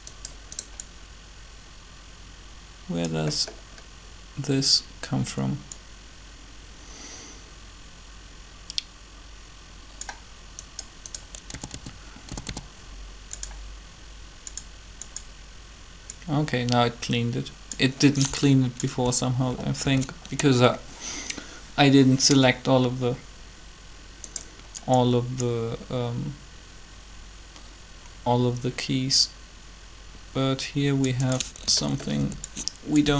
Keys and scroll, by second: 11.4-12.4 typing, 19.8 alt+a, 32.2 b.